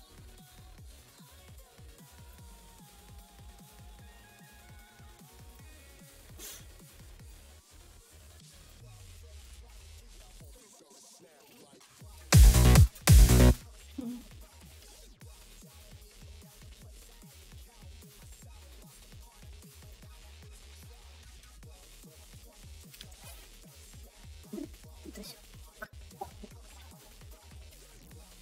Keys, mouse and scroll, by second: 0.9-2.2 drag, 3.1-5.5 drag, 7.2-8.6 drag, 9.4 click, 12.2 space, 12.7 space, 12.9 space, 13.3 space, 14.9 right click, 17.3 click, 18.8-19.8 drag, 20.7 right click, 24.7 right click, 25.6 right click, 26.8 right click, 27.5 right click.